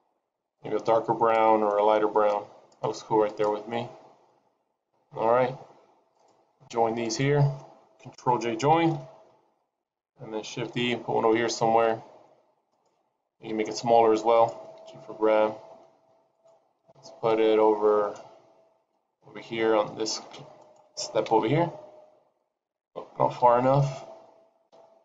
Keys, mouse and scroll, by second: 3.2 click, 6.7 click, 7.0 shift+click, 8.8 ctrl+j, 10.7 shift+d, 12.7 shift+d, 13.4 s, 14.8 g, 17.0 KP_7, 18.9-19.9 scroll down 2, 19.4 g, 21.2 KP_0, 23.4 KP_7, 24.6 KP_2.